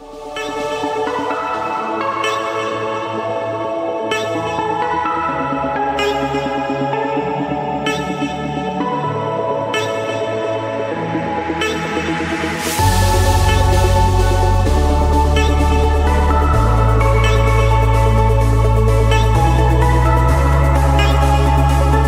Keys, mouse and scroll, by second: 1.1 2, 4.0 5, 5.1 Return, 6.2 Escape, 7.6 click, 21.2 click, 21.8 scroll.